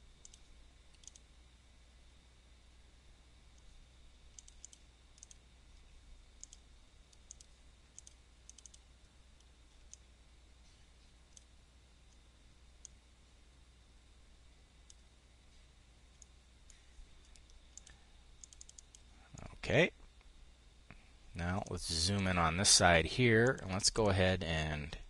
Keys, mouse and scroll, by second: 12.3-14.7 drag, 15.7 click, 18.8 click, 24.7-25.0 drag.